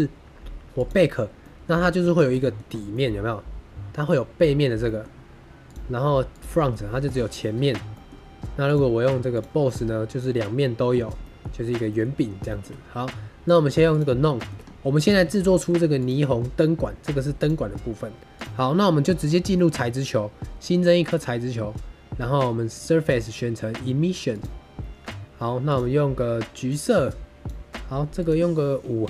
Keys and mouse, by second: 1.3 middle drag, 2.0 shift+middle drag, 2.2 middle drag, 2.8-4.0 middle drag, 4.7 middle click, 5.6-6.3 drag, 6.6-7.1 middle drag, 7.9 middle click, 8.7-9.3 drag, 9.7-10.3 middle drag, 11.1 middle drag, 11.8 middle click, 12.4 shift+middle drag, 13.5-13.9 drag, 14.3 shift+middle click, 15.2 shift+middle drag, 15.5 middle click, 17.3 right click, 18.2 click, 19.5 middle click, 21.1 click, 22.7-24.3 drag, 25.6 click, 28.1-29.0 drag.